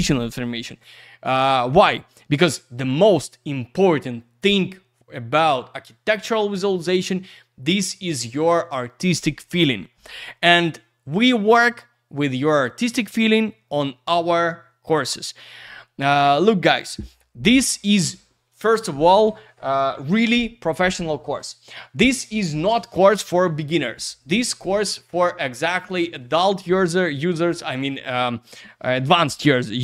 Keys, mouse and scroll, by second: 1.1 click.